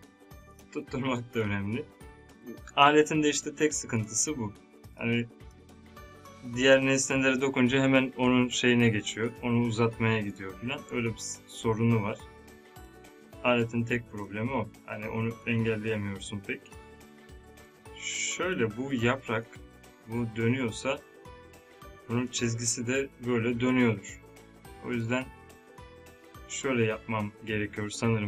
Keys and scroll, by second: 10.9 space.